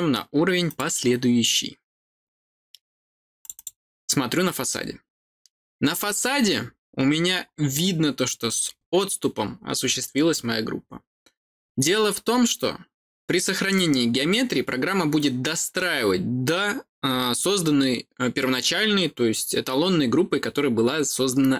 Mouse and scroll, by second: 0.6 click, 3.3 click, 3.5 click, 4.8-6.4 scroll up 2, 6.4-6.7 scroll up 1, 6.7-7.4 scroll down 2, 7.4-8.6 scroll up 2, 8.6-9.4 scroll up 1, 9.4-10.7 scroll down 2, 10.7-11.2 scroll down 1.